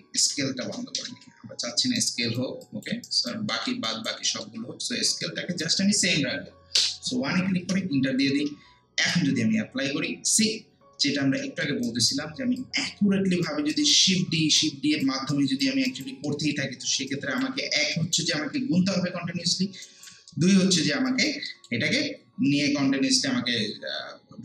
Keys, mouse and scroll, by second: 0.2 ctrl+z, 2.0 alt+right click, 2.6 alt+click, 3.1 alt+right click, 3.5 alt+middle click, 3.9 alt+right click, 4.2 alt+middle click, 5.2 click, 6.8 1, 7.6 Return, 9.0 click, 10.3-11.1 scroll down 1, 11.4 alt+middle click, 11.8 alt+right click, 12.6 alt+click, 13.7 alt+right click, 14.1 alt+middle click, 14.6 alt+right click, 16.3 alt+middle click, 17.1 alt+right click, 18.3 alt+scroll down 1, 18.3 alt+middle click, 19.8 alt+right click, 20.3 alt+middle click, 21.1 alt+right click, 21.5 alt+middle click.